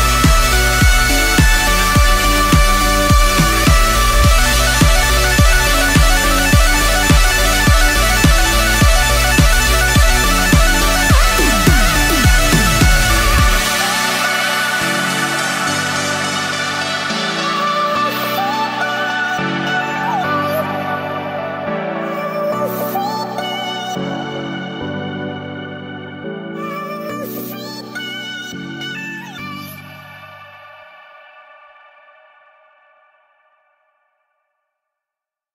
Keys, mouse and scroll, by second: 0.0-1.1 typing, 1.3 Return, 2.2 click, 4.1 F10, 4.3 right click, 5.4 click, 5.9-8.3 typing, 9.8-11.7 typing, 12.3 click, 13.0-14.9 typing, 16.1 Return, 16.9-18.0 drag, 20.4 shift+click, 21.4 ctrl+c, 21.6 ctrl+v, 22.2-25.0 drag, 25.5 ctrl+v, 25.9-28.9 drag, 30.3 right click, 30.5-30.9 scroll down 2, 30.9 right click, 32.8-34.6 typing, 35.1 Return.